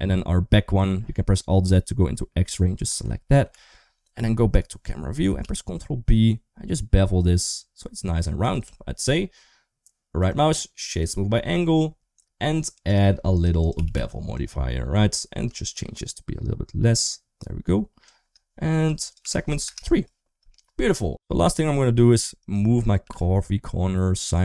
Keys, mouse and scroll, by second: 2.2 shift+click, 3.3 alt+z, 4.3 KP_0, 5.2 ctrl+b, 8.5 Tab, 10.2 right click, 12.7 drag, 13.1 click, 13.5 click, 15.5 shift+click, 18.9 click, 21.4-22.3 right drag, 22.3 click, 22.8 g.